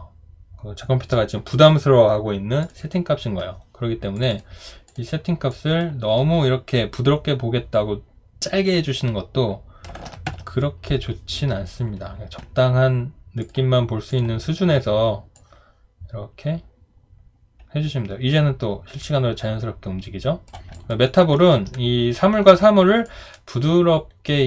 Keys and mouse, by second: 10.0-10.8 typing, 20.7 alt+click, 21.0 alt+right click, 21.3 alt+middle click.